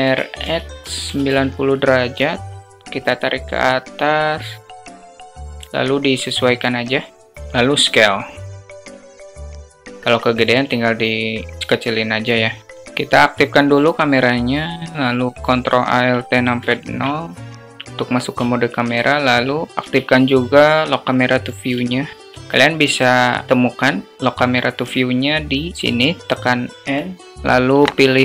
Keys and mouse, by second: 2.4-3.5 drag, 4.7 click, 5.3 alt+click, 5.4 alt+middle click, 7.6 s, 8.7 click, 9.3 click, 9.6 alt+click, 10.0 click, 10.3 s, 11.6 click, 14.0-15.7 drag, 16.5 ctrl+alt+KP_0, 18.3 alt+shift+drag, 18.6 alt+shift+middle click, 19.7 q, 21.7 alt+shift+middle click, 21.8 alt+shift+click, 21.9 alt+shift+middle click, 22.2 alt+shift+drag, 23.0 click, 23.7 click, 25.5 click, 25.7 n.